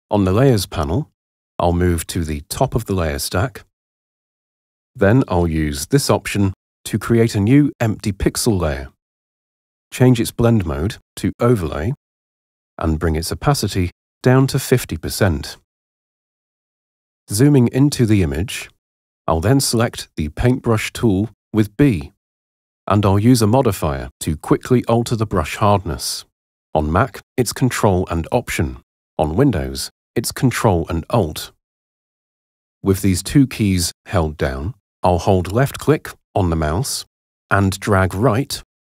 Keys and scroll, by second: 20.7 b.